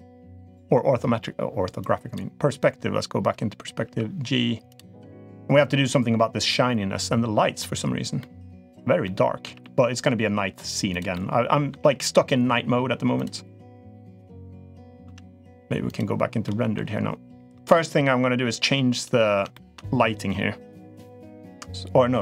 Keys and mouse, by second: 0.4-2.0 drag, 3.6 g, 5.5 g, 7.9-8.4 middle drag, 8.8-9.2 middle drag, 9.3 g, 10.9-11.5 middle drag, 11.5 g, 14.8 z, 16.2 middle drag, 17.5-18.4 middle drag, 18.8 click, 19.3 shift+middle drag.